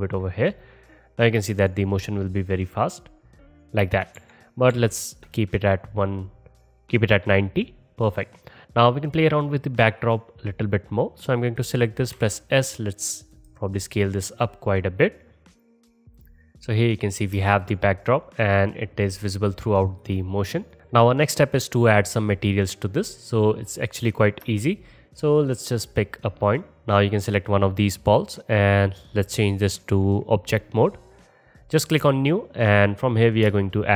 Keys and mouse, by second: 1.5 space, 3.9 space, 4.6 ctrl+z, 4.8 ctrl+z, 5.9-10.2 middle drag, 11.5 middle click, 12.2 s, 13.6-17.0 drag, 17.7 click, 17.7 space, 18.7 drag, 24.7 space, 27.2-29.5 drag.